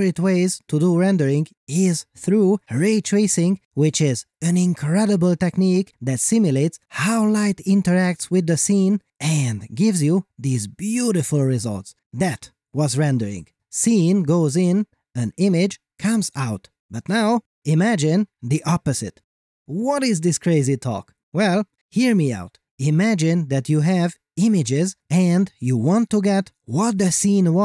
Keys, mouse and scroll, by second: 2.3 click, 3.5 middle click, 3.9 shift+scroll up 2, 4.0 scroll down 1, 4.1 scroll up 1.